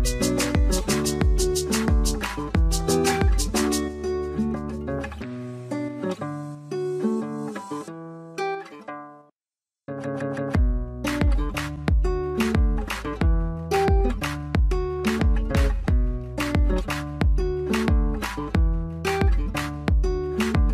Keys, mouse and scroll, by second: 3.2 double click, 8.5-9.1 scroll down 1, 16.3 scroll up 1.